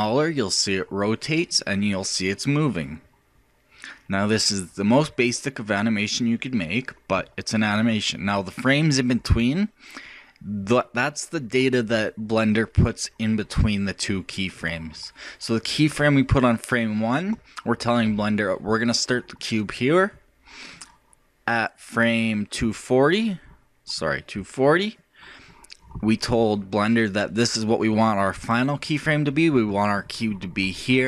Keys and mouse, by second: 8.4-16.8 drag, 22.5-25.7 drag.